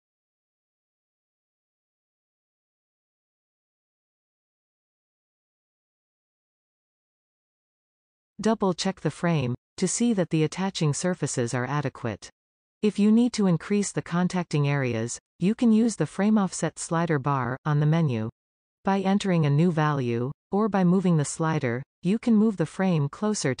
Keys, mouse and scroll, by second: 1.5 scroll up 3, 1.6 shift+middle click, 2.2 click, 2.4 g, 3.2 scroll down 2, 3.4-6.1 middle drag, 6.1 scroll down 1, 6.2 shift+middle click, 7.2 middle click, 7.6 scroll up 1, 7.9-17.5 shift+middle drag, 14.4-15.2 scroll down 1, 15.2-16.2 scroll down 1, 16.2-17.5 scroll down 1, 17.5-19.7 drag, 19.7-21.7 middle drag, 21.7-23.6 drag.